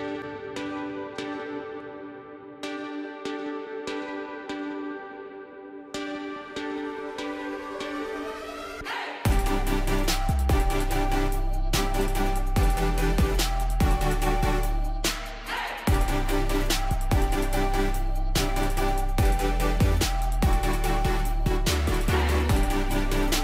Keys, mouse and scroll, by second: 12.3 right click, 13.9-23.4 drag.